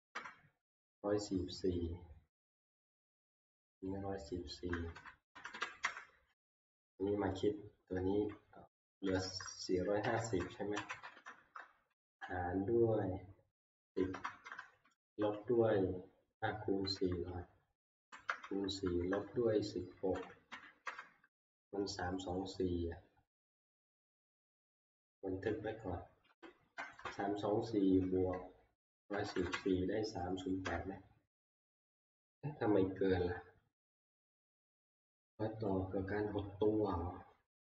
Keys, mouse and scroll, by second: 0.1 Return, 3.5-5.8 typing, 3.9-6.3 drag, 6.3 Return, 7.1 alt+Tab, 8.8-11.9 typing, 13.7-15.4 typing, 16.8-21.0 typing, 26.3 ctrl+m, 29.0 typing, 30.6 Return.